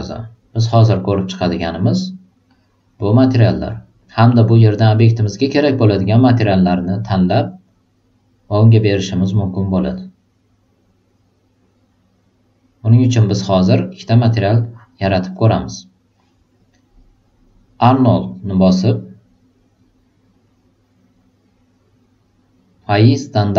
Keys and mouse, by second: 0.5 click, 1.9 click, 2.4-3.1 drag, 5.4-7.7 drag, 14.5 click, 18.0 click, 20.4-21.1 drag.